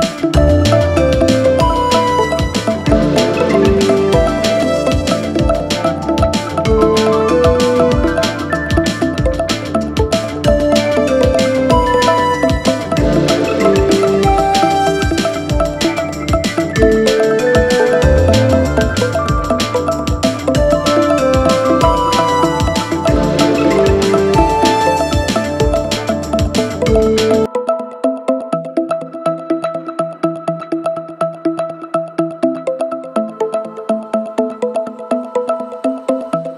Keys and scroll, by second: 0.0 4, 5.0 3, 5.9 ], 7.3-10.5 typing, 11.7 3, 12.8-23.5 typing, 26.0 ], 28.3-31.2 typing.